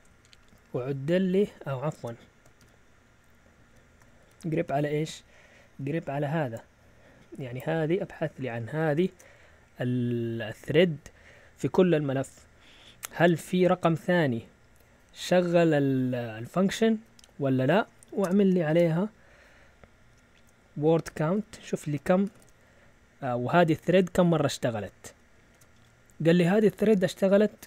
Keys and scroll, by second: 1.9-2.5 typing, 3.7-4.7 typing, 8.9 ctrl+shift+Insert, 11.9 Right, 13.2 space, 17.2 Left, 17.8 Right, 18.2 |, 18.6 space, 21.1-23.7 typing, 25.5 Return.